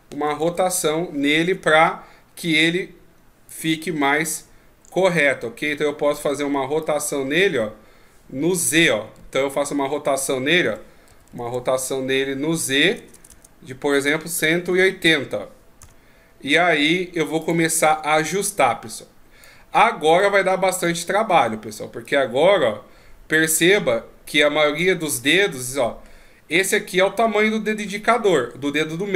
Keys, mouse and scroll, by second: 3.5 click, 5.1 click, 6.8 click, 9.2 ctrl+z, 10.6 r, 17.4 click, 18.4 click, 20.2 click, 22.0 click, 25.2 middle click.